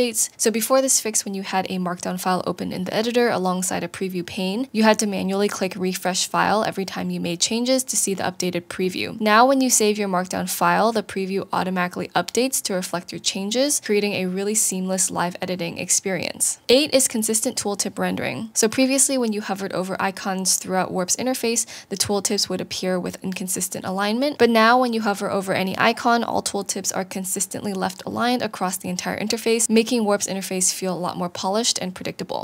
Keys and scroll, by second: 0.0 Down, 1.7 Down, 1.9 Right, 5.5 Down, 5.8 Up, 9.1 BackSpace, 11.0 super+s, 12.8 shift+l.